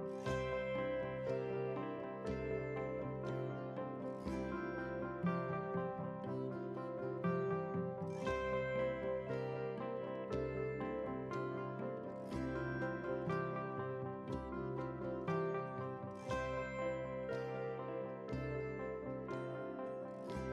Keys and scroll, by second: 4.2 ctrl+space.